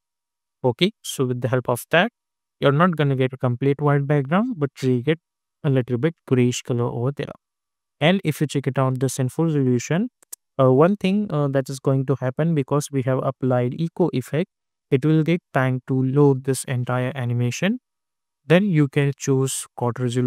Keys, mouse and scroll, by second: 0.0 Return, 0.4 j, 0.7 space, 8.2 click, 10.2 space, 13.0 click, 17.3 click.